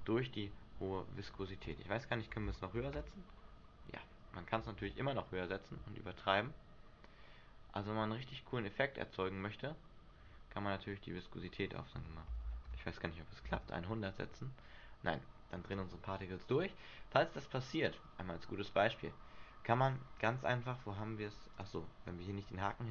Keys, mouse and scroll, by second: 1.0 Escape, 1.8 click, 4.9 alt+a, 10.4 Escape, 11.3 click, 13.7 alt+a, 14.8-15.4 scroll down 4, 15.4-16.6 scroll up 4, 16.1 Escape, 21.7 click.